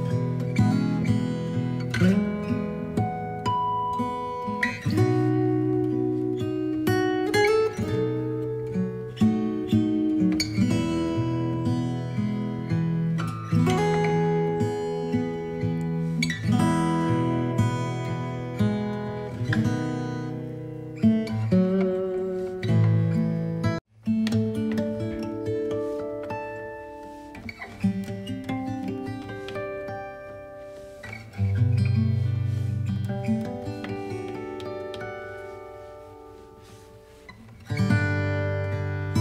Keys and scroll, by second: 20.8 b, 28.3 ctrl+d.